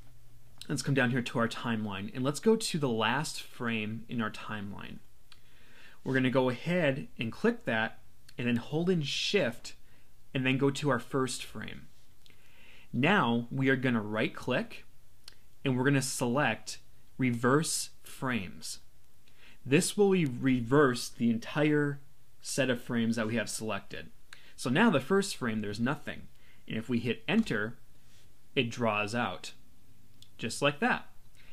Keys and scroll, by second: 27.4 Return.